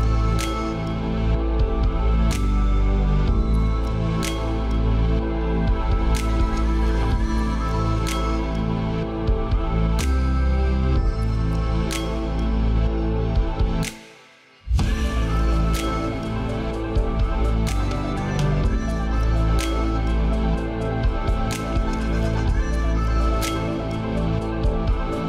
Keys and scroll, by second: 1.3 ctrl+v, 3.9 ctrl+a, 12.1 ctrl+z.